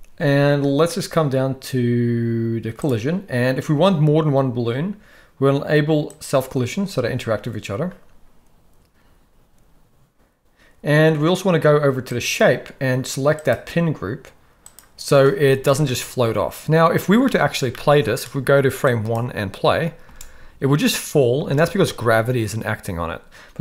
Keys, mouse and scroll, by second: 2.8 click, 6.1 click, 13.4-14.8 drag, 15.6 shift+middle drag, 17.2-17.5 shift+middle drag, 17.7 middle click, 18.8 click, 20.0 space, 21.4 space.